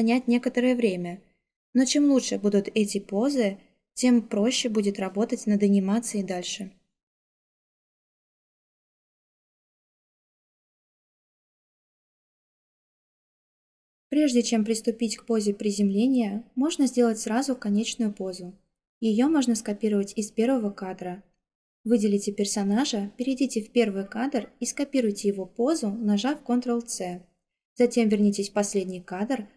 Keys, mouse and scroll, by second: 26.4 ctrl+c.